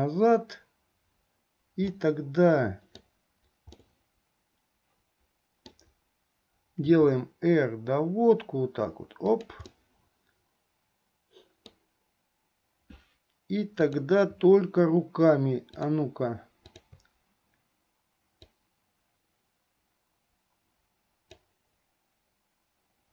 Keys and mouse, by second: 2.0-3.2 middle drag, 3.9-6.0 middle drag, 9.9-12.0 middle drag, 15.7 shift+click, 16.9 shift+click, 18.8-22.9 drag.